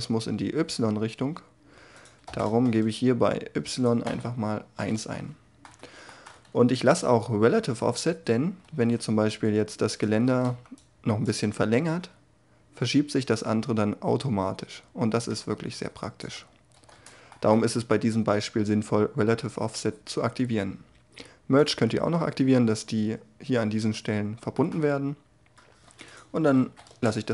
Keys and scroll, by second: 2.4 Return, 4.0 1, 4.6 Return, 10.2 a, 10.4 c, 16.3 ctrl+z, 26.6 5, 26.8 Return.